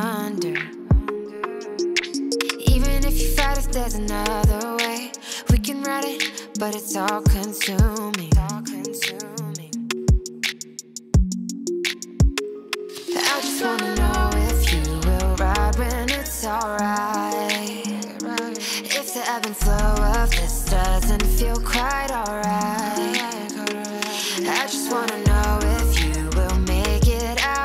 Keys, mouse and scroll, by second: 0.8 click, 1.6 click, 2.2 click, 4.5 click, 5.0 click, 7.9-8.6 scroll up 1, 8.6 click, 9.4-10.9 drag, 11.4 click, 12.0 0, 13.6 click, 13.8 click, 14.3 0, 17.0 click, 17.3 0, 20.2-21.3 drag, 23.3 click, 23.7-25.4 middle drag, 25.4 shift+a.